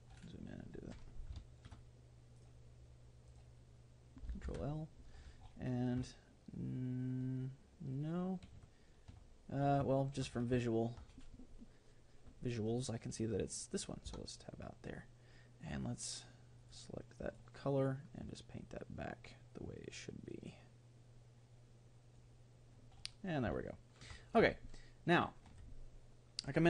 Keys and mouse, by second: 1.4-3.1 middle drag, 2.3 click, 2.8-5.4 right drag, 4.5 ctrl+l, 6.1-14.2 middle drag, 14.2 Tab, 15.6-17.3 drag, 17.9-19.4 drag, 23.7-26.6 middle drag.